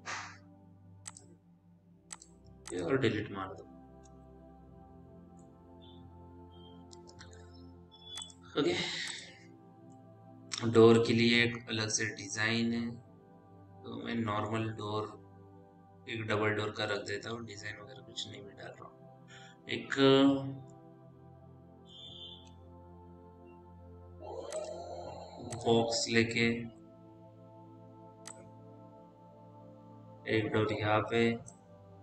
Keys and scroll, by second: 4.4 Delete, 22.8 f.